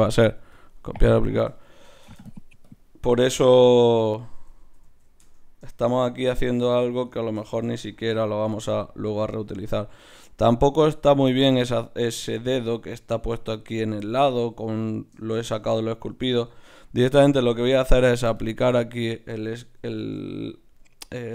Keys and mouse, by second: 0.5-4.6 drag, 1.5 Tab, 1.9-4.6 right drag, 4.6 ctrl+z, 5.0 ctrl+z, 5.2 Tab, 17.7 Tab, 18.4-20.7 drag, 19.4 Tab, 20.0 ctrl+Tab.